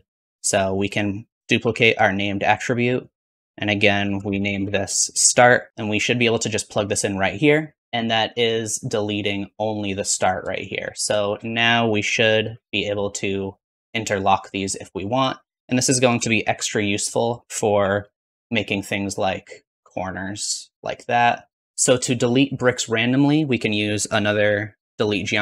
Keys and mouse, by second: 0.6 middle click, 0.9-5.8 drag, 1.5 shift+d, 3.0-5.8 middle drag, 3.0-5.8 right drag, 11.1 shift+middle click, 12.0 g, 15.1-16.4 drag, 16.1 r, 17.6 g, 18.0 shift+click, 19.6-21.5 shift+drag, 21.6 click, 21.6 ctrl+x, 23.6-25.4 drag, 23.6 middle click, 23.6 right click, 24.2 shift+d.